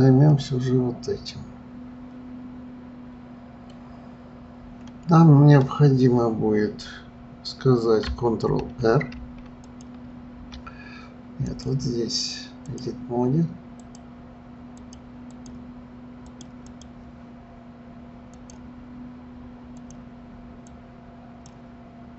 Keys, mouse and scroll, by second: 0.3-3.3 middle drag, 9.1 ctrl+r, 9.6 ctrl+click, 11.4-13.9 drag, 14.7 click, 15.3 click, 16.2 click, 16.6 click, 18.3-19.9 drag, 20.6-22.1 drag.